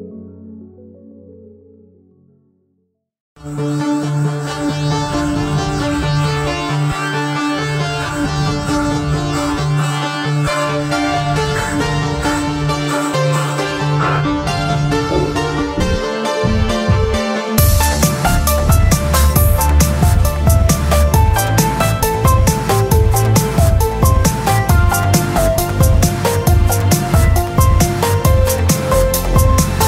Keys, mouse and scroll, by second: 1.6 Tab, 3.3 Tab, 4.6 click, 5.4-6.3 drag, 6.4-7.6 drag, 7.6 KP_7, 9.6 ctrl+alt+shift+c, 11.8 KP_Decimal, 16.2 Tab, 17.7 middle click, 18.6 g, 18.6-20.0 middle drag, 21.0 r, 22.4 Tab, 29.6 Tab.